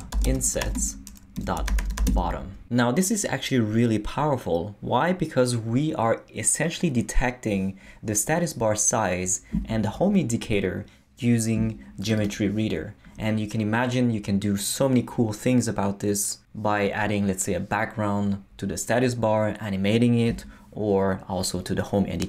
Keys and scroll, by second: 0.0-2.5 typing.